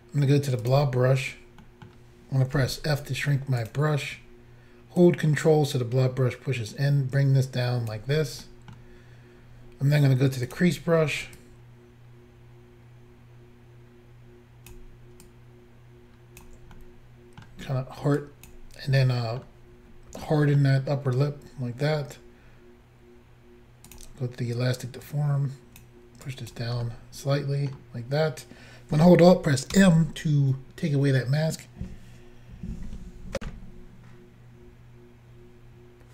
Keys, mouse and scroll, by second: 0.7 click, 0.7 click, 1.7 middle click, 2.6 f, 3.6 click, 3.7 click, 5.0 ctrl+click, 8.5 middle click, 10.5 click, 10.6 click, 11.4 ctrl+click, 15.3 ctrl+click, 16.8 middle click, 18.3 ctrl+click, 19.0 middle click, 20.3 middle click, 23.9 click, 24.0 click, 25.1 click, 26.3 click, 26.9 middle click, 29.8 alt+m, 33.4 Insert.